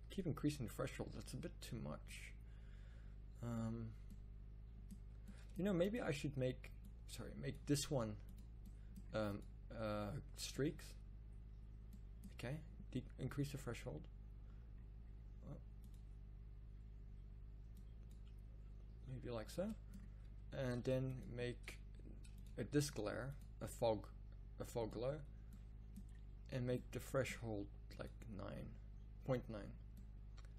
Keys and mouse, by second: 22.9 shift+a.